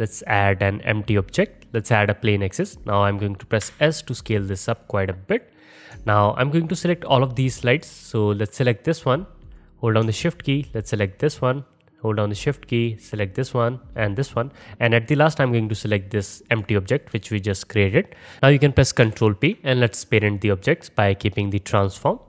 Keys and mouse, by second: 3.6 s, 5.3 click, 5.4-7.2 middle drag, 7.2 alt+click, 7.2 alt+middle click, 7.4 alt+click, 7.5-9.5 alt+middle drag, 9.5 click, 9.6-11.2 middle drag, 11.2 shift+click, 11.3-12.8 shift+middle drag, 12.8 shift+click, 12.9-14.0 shift+middle drag, 14.0 shift+click, 14.1-16.5 shift+middle drag, 16.5 shift+click, 18.4 ctrl+z, 19.0 ctrl+p.